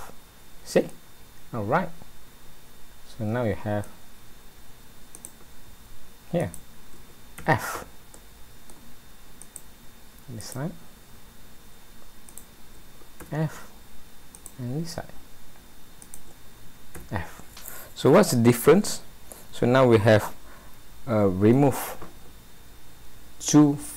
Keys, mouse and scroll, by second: 0.9 middle click, 5.2 click, 6.5 shift+click, 7.4 f, 8.2 middle click, 9.4 click, 10.5 click, 12.3 shift+click, 13.2 f, 14.4 click, 16.1 shift+click, 17.0 f, 17.8 middle click.